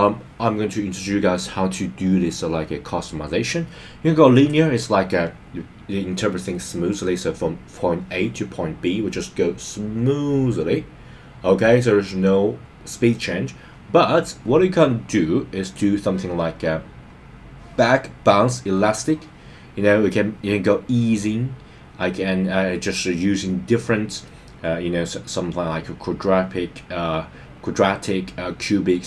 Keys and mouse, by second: 4.3-14.5 drag, 15.6-18.6 drag, 18.7 click, 22.6-29.0 drag.